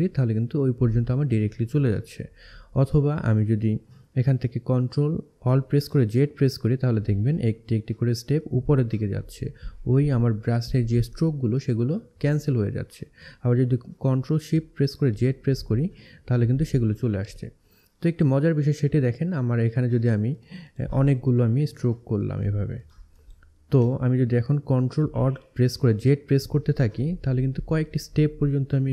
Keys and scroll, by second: 4.9 ctrl+alt+z, 14.2 ctrl+shift+z.